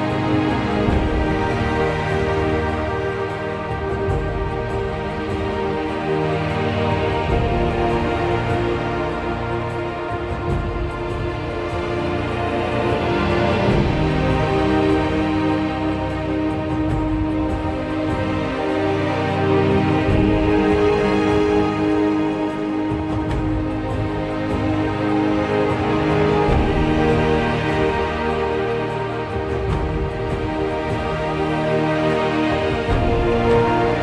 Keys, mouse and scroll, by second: 2.1 ctrl+z, 3.9 ctrl+z, 4.6 ctrl+z, 5.5 ctrl+z, 10.5 ctrl+z, 11.2 ctrl+z, 12.2 ctrl+z, 19.4 ctrl+z, 20.4 ctrl+z.